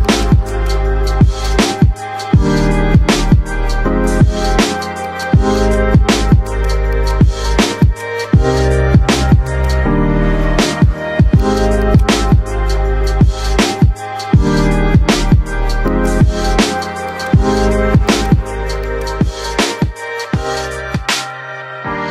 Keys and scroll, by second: 13.8 F3.